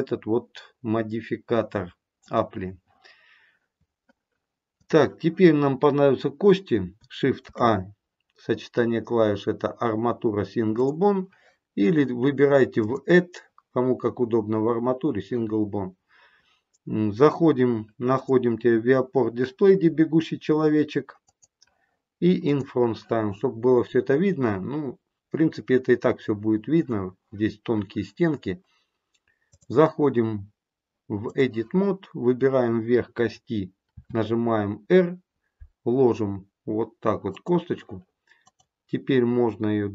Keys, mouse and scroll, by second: 4.7 click, 7.3 shift+a, 12.7 click, 18.0 click, 22.4 click, 29.4 click, 38.3 click.